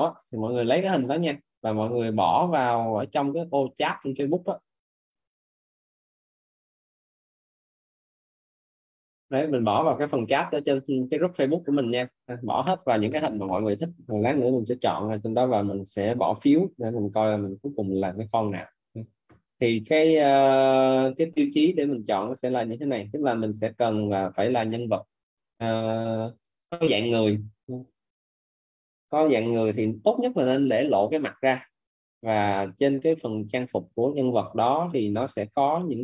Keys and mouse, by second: 2.5 click, 10.9 click.